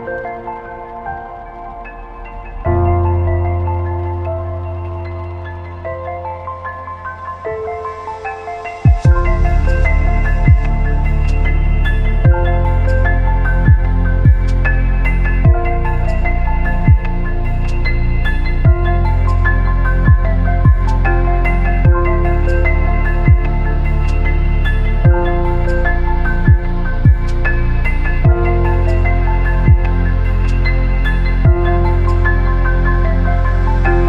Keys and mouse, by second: 0.7 g, 2.1 z, 2.5 shift+click, 3.1 g, 6.5 a, 6.7 b, 8.8-10.4 drag, 10.6 a, 10.9 b, 12.0 click, 12.7 a, 13.0-13.7 shift+drag, 13.9 ctrl+r, 22.1-22.4 shift+drag, 23.3 a, 23.6 b, 25.7-27.6 shift+drag, 27.6 b, 28.8-30.5 shift+drag, 30.8 b, 32.0-33.4 shift+drag, 33.6 b.